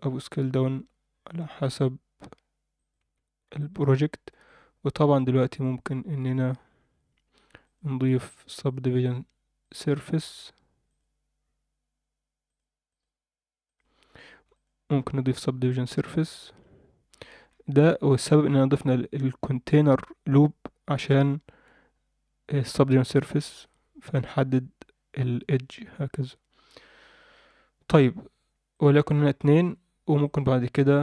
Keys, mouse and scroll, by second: 3.0 Tab, 3.1-3.6 scroll down 2, 3.6 shift+middle drag, 4.4 click, 5.6 click, 7.6-9.6 drag, 10.9 click, 12.4 click, 12.9-13.9 drag, 14.5-16.7 drag, 17.1-17.7 scroll up 4, 17.9 Tab, 18.1-20.6 scroll up 2, 23.6 Tab, 25.9-26.2 drag, 28.7 click, 29.5-30.2 scroll down 4, 29.6 Tab, 30.2 alt+middle click.